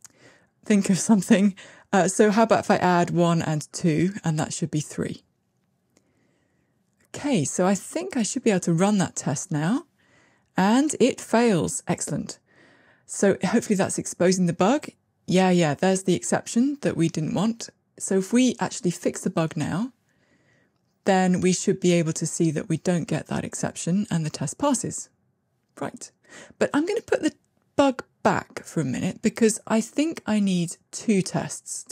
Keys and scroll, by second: 0.1 Tab, 7.6 ctrl+r, 21.3 ctrl+r, 31.5 ctrl+r.